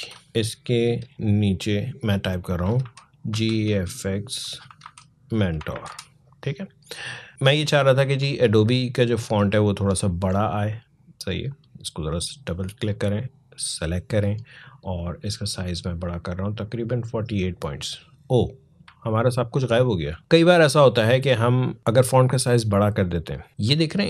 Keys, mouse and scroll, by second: 0.3 alt+click, 0.6 alt+Return, 2.6 alt+g, 3.1 alt+f, 4.5 alt+m, 4.6 alt+e, 5.4 alt+t, 5.5 alt+o, 5.6 alt+r, 7.3-18.7 alt+drag, 18.7-19.9 alt+scroll down 1.